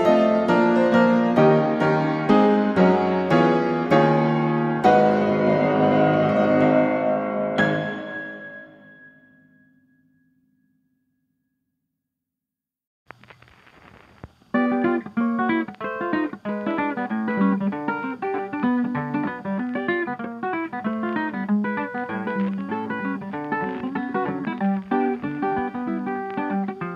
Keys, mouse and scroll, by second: 0.9 1, 1.7 BackSpace, 1.9 BackSpace, 3.2 Return, 6.6 ctrl+s, 7.5 click, 9.0 click, 10.9 click, 11.1 Escape, 12.2 click, 14.3-15.5 drag, 17.3-18.3 drag, 21.0-22.1 drag, 26.1-26.9 drag.